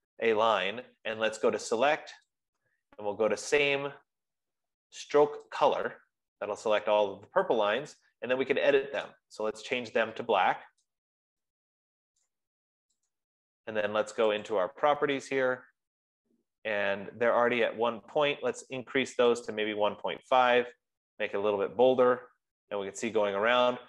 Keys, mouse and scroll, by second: 2.7 F15, 2.7 click, 6.0 click, 9.6 click, 10.3 click, 12.6 click, 13.6 click, 15.0 click, 19.8 click.